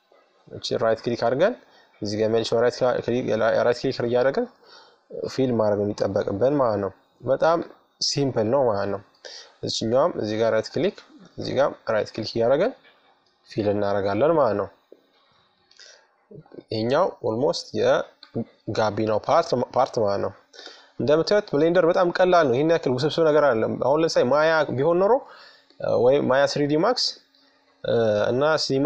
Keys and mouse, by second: 2.1 f, 3.3-4.7 middle drag, 4.7-7.9 right drag, 7.1 f, 8.0 middle click, 9.3-12.3 right drag, 11.1 f, 12.4 right click, 12.7-13.8 middle drag, 15.0-18.3 right drag, 17.3 f, 19.1-22.0 right drag, 21.2 f, 22.5-24.2 middle drag, 24.3-27.3 right drag, 26.7 f, 28.5-28.8 right drag.